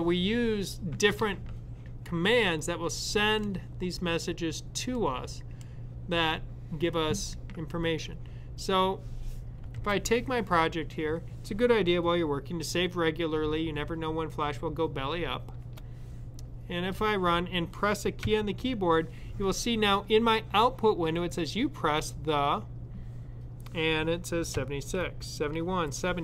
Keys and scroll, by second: 9.6 super+s, 18.0 |, 24.4-25.4 typing.